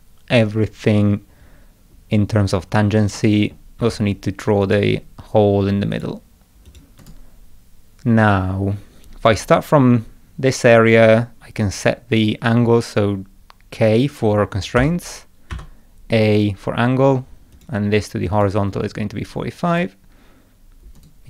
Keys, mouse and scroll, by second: 3.2 middle click, 3.8 Escape, 4.6 click, 5.9 click, 6.7 click, 7.0 right click, 14.8 k, 15.5 a, 17.5 click, 18.4 click, 19.7 click, 21.0 right click.